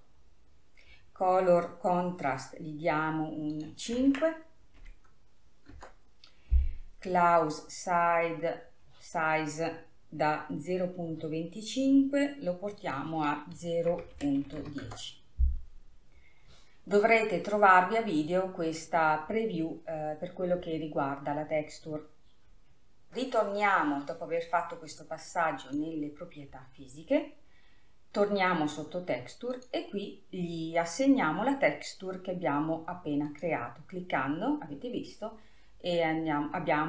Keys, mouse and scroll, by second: 4.0-7.0 drag, 8.9-9.4 scroll up 2, 13.2-16.2 drag, 16.2 scroll up 2, 21.2-23.1 scroll up 1, 26.2 click, 26.7-30.0 scroll down 10, 30.0-33.2 drag.